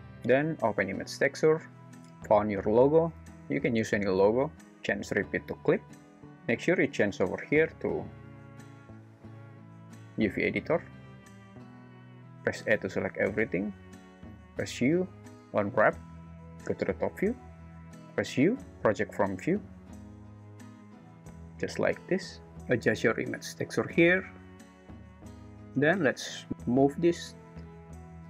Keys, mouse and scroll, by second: 0.9 click, 5.1-6.3 drag, 9.4-10.6 drag, 12.5 a, 14.4 u, 18.1 u, 22.6 r, 25.7-26.2 drag, 27.1 g.